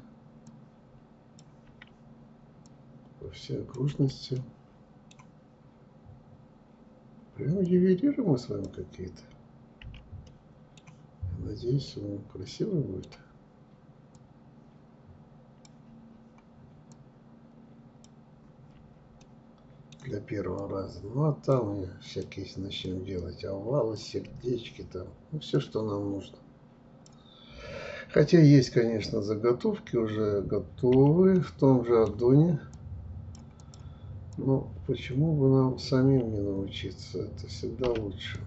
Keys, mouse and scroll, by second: 0.9 f, 1.9-3.1 drag, 3.1 f, 3.6-6.6 middle drag, 6.9-9.0 drag, 9.0 f, 9.5-13.4 middle drag, 13.4-15.1 drag, 15.1 f, 16.1-18.0 drag, 18.0 f, 18.4-19.8 middle drag, 19.8-23.5 drag, 23.5 f, 24.8-27.8 drag, 30.6-31.9 middle drag, 31.9-35.4 drag, 35.4 f, 37.6 click, 38.1-38.4 middle drag.